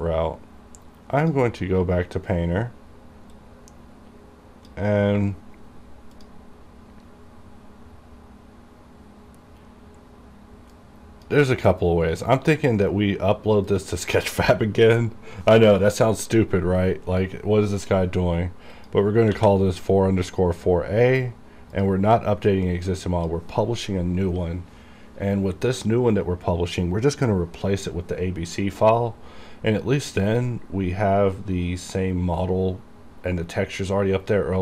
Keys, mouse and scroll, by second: 1.4-6.3 drag, 6.3 click, 10.8-13.8 drag, 13.8-18.9 drag, 18.9 click, 19.5 a, 21.9 click, 23.0-34.6 drag.